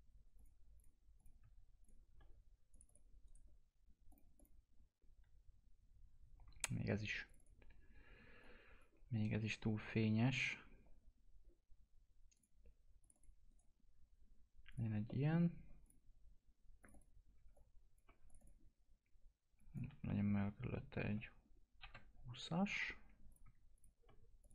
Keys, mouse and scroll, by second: 0.4 click, 3.2 right click, 4.1 click, 4.9-6.3 scroll down 1, 7.2-12.3 drag, 13.5 right click, 14.7 click, 15.0 middle click, 15.8 click, 16.9 click, 17.3 click, 17.5 shift+click, 21.0 2, 23.0-23.7 typing, 23.4 click, 23.7 shift+click, 24.4 click.